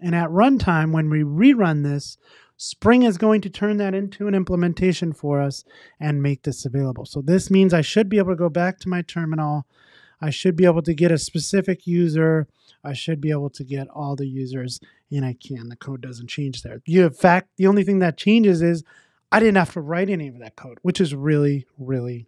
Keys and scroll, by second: 1.0 ctrl+r.